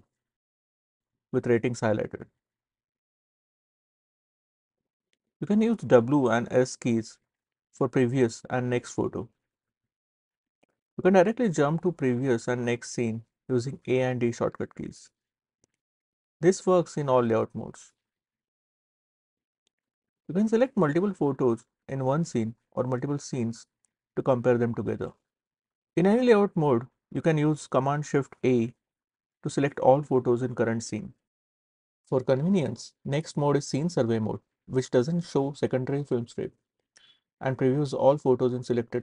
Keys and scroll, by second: 5.9 s, 7.1 s, 8.2 s, 9.3 s, 11.6 a, 13.4 d, 15.9 d, 16.9 a, 17.8 a, 19.0-22.3 typing, 28.0 shift+super+a.